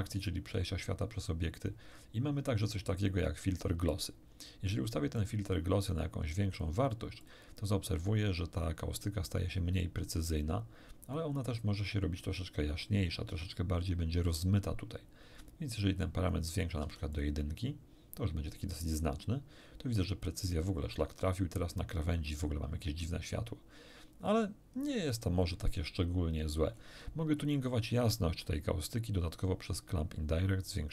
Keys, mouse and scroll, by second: 5.2 middle click, 6.3 middle click, 7.2 middle click, 7.7 middle click, 10.2-11.3 middle drag, 15.8-16.8 middle drag, 16.8 1, 17.1 click, 18.4-18.9 scroll down 2, 20.0 scroll down 1, 24.8-25.1 scroll down 1, 26.7 scroll up 1, 28.3-28.6 scroll down 1, 29.8-30.9 drag.